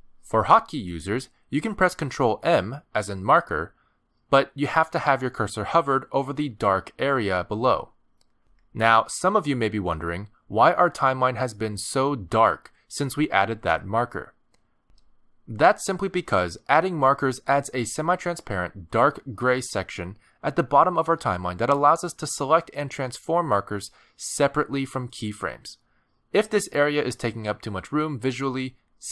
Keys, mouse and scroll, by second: 5.6 ctrl+m, 25.8 click, 28.4 click.